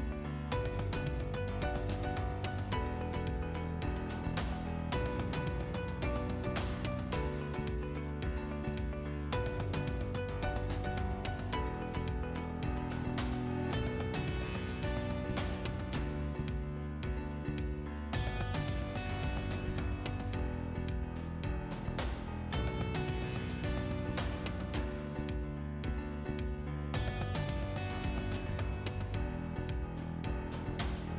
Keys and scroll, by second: 7.9 p, 8.2 l, 8.6 space, 17.2 space, 22.4-23.7 typing.